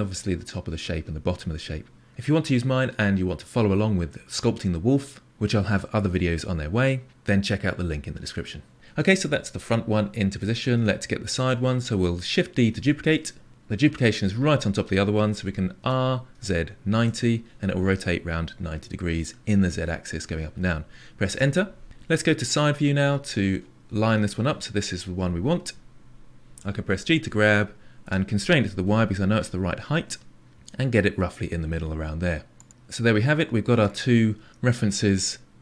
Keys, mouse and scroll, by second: 9.2-12.3 middle drag, 12.7 shift+d, 15.7 r, 22.4 KP_3, 26.8 g, 32.7-34.1 middle drag, 34.1-34.5 scroll down 4.